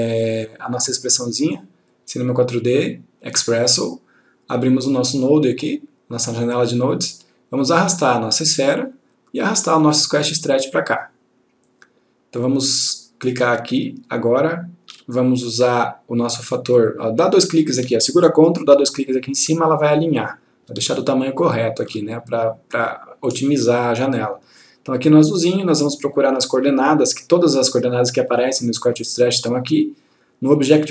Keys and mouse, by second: 0.8 right click, 3.7 click, 8.0-8.9 click, 13.9 ctrl+click, 16.8 click, 19.0 ctrl+click, 21.3 ctrl+click, 25.4 click.